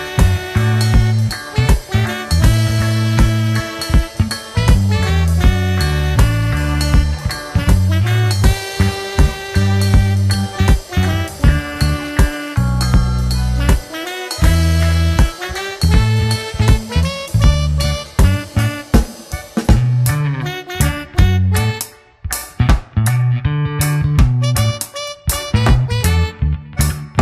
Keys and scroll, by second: 0.4 ctrl+d, 0.5 ctrl+KP_Subtract, 1.0 ctrl+KP_Subtract, 1.7 ctrl+w, 2.1 Return, 3.4 alt+space, 3.8 c, 5.0 Return, 5.5 ctrl+KP_Add, 6.4 alt+i, 6.6 alt+a, 7.4 space, 8.2 shift+F2, 8.6 ctrl+space, 8.9 w, 9.9 ctrl+d, 14.8 Return, 15.5 ctrl+b, 17.1 Return, 17.4 space, 18.0 shift+F2, 18.4 ctrl+d, 18.6 ctrl+space, 20.2 ctrl+g, 21.9 ctrl+space, 22.2 Return, 26.4 w.